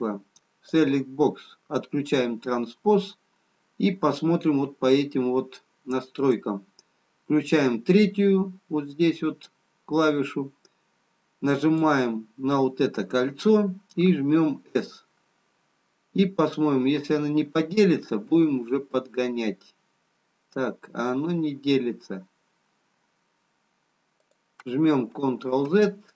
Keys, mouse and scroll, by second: 1.0 click, 1.0 scroll down 2, 6.5 click, 11.8 click, 14.0 s, 25.6 ctrl+z.